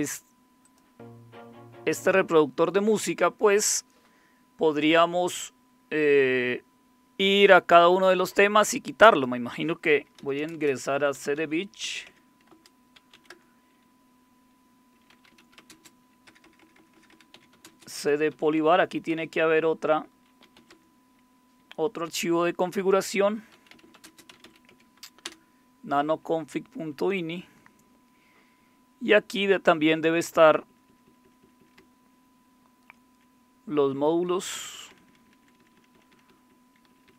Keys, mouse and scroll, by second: 0.6 click, 2.0 click, 9.1 click, 10.0-13.5 typing, 12.5 Return, 14.9-19.1 typing, 20.2-21.0 typing, 22.7-24.9 typing, 25.3 Return, 26.9 Down, 27.6-29.3 Down, 30.2 Down, 30.5 Down, 30.7 Down, 31.1 Down, 31.2 Down, 31.4 Down, 31.6 Down, 31.7-33.1 Down, 34.0 Down, 34.1 Down, 34.4 Down, 34.7 Down, 34.8 Down, 35.2 Down, 35.4 Down, 35.6 Down, 35.7 Down, 35.9 Down, 36.1 Down, 36.5 Down, 36.8 Down, 37.1 Down.